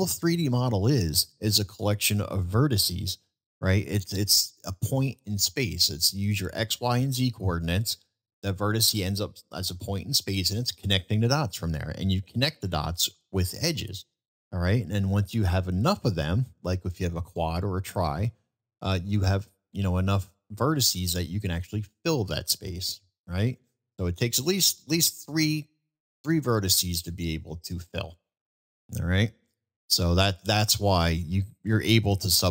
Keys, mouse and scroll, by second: 0.9-1.4 middle drag, 12.0 middle drag, 14.9-15.5 middle drag, 17.0 middle click, 22.1-23.6 middle drag, 28.9 middle drag.